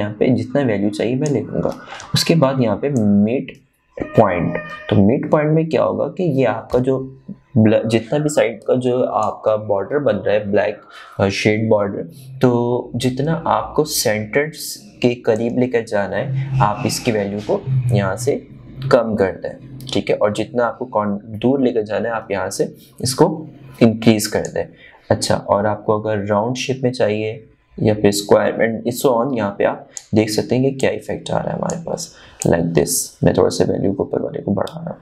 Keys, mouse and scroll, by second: 4.4-13.1 drag, 16.9-35.0 drag.